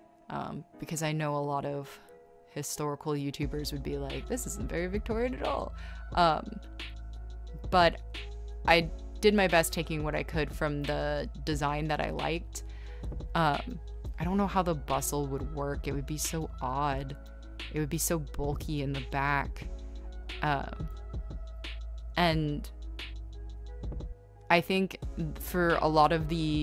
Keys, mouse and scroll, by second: 0.9 e, 2.2 space, 5.7 ctrl+z, 8.3 z, 8.7 space, 8.7 z, 9.3 right click, 10.4 z, 11.1 scroll, 11.7 scroll, 12.7 scroll, 14.5 right click, 15.6 scroll, 17.1 space.